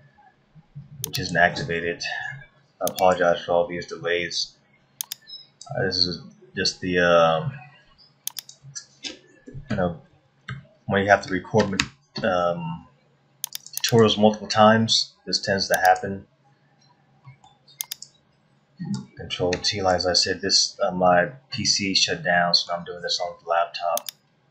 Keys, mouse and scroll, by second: 1.1 click, 16.8-17.8 scroll up 3, 17.2 middle click, 17.9 click, 19.6 ctrl+t, 21.1 middle click, 22.3 middle click, 24.0 click.